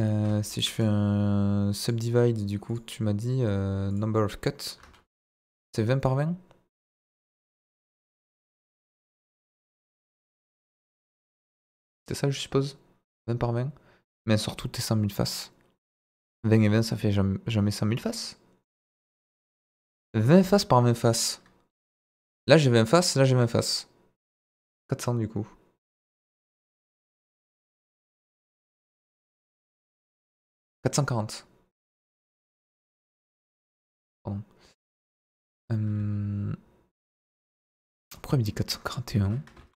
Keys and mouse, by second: 0.7-1.8 right drag, 2.6 click, 3.9-11.0 drag, 33.9 click, 35.9 a, 38.8 click, 39.5 ctrl+a.